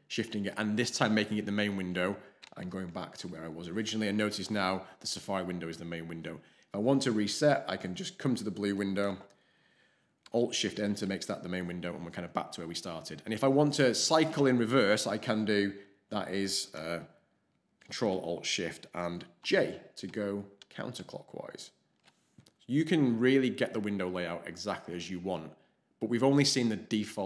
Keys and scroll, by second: 2.4 ctrl+alt+shift+k, 10.6 alt+shift+Return, 19.4 ctrl+alt+shift+j, 20.1 ctrl+alt+shift+j, 20.6 ctrl+alt+shift+j.